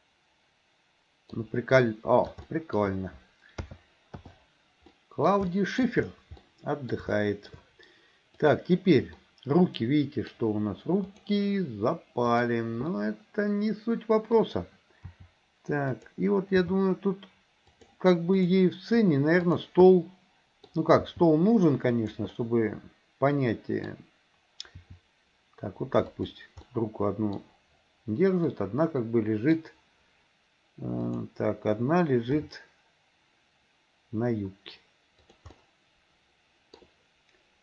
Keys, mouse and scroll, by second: 1.9-2.3 scroll up 1, 2.3 shift+middle click, 2.5 scroll up 1, 2.5 shift+middle click, 3.7 a, 4.3 i, 5.0 middle click, 5.6 middle click, 6.5 middle click, 7.2 shift+middle click, 8.5 click, 9.2-10.3 middle drag, 11.2 click, 12.3 click, 12.9-14.5 middle drag, 15.2 r, 16.7 g, 19.5 click, 20.0 middle click, 21.2 g, 22.4 scroll up 1, 22.6-24.0 middle drag, 24.9 r, 26.7 middle click, 28.6-29.6 middle drag, 31.1 click, 32.5 r, 35.6-36.8 middle drag.